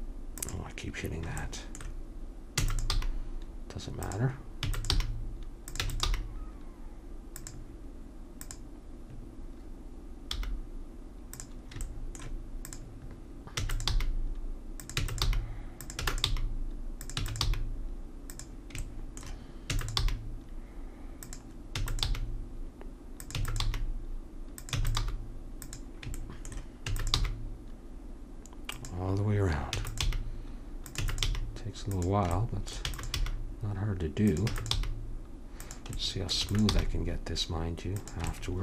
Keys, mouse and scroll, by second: 2.6 e, 2.9 g, 4.6 e, 4.9 g, 6.1 g, 10.3 g, 13.6 e, 13.9 g, 15.0-17.5 typing, 19.7 e, 20.0 g, 21.7 e, 22.1 g, 23.4 e, 23.6 g, 24.8 e, 25.0 g, 26.8 e, 27.2 g, 29.8 e, 30.0 g, 31.0 e, 31.3 g, 32.4 middle click, 32.8 e, 33.2 g, 34.5 e, 34.7 g, 36.4 e, 36.7 g.